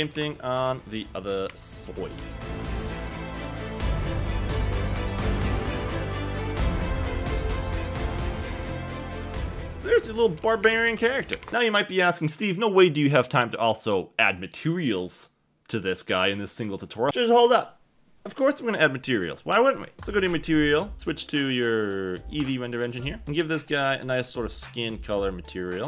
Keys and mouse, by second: 0.1 3, 1.5 KP_7, 2.4 shift+middle click, 2.6-11.5 typing, 2.8 click, 3.3 click, 4.1 click, 4.3 click, 4.5 ctrl+z, 4.5 ctrl+z, 4.7 click, 5.9 click, 6.2 click, 7.4 click, 7.5 click, 8.5 Tab, 8.6 Tab, 8.8 click, 9.2 click, 9.3 Tab, 9.3 Tab, 9.5 shift+middle click, 9.7 Tab, 23.5 click.